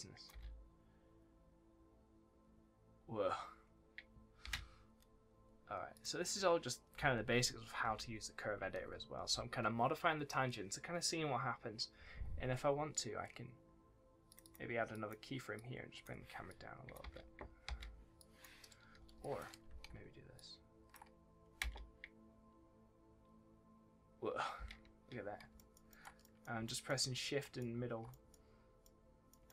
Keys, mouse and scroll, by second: 0.2 space, 4.4 space, 5.9 click, 14.2 click, 14.4 double click, 14.9 click, 17.0 space, 18.1 click, 18.9 Delete, 19.1 click, 20.3 shift+click, 21.6 space, 24.5 space, 25.1 scroll down 1, 25.5 shift+middle click, 26.2 middle click, 26.6 shift+middle click, 27.3 shift+middle click, 28.0 middle click, 28.5 scroll down 1, 28.8 middle click.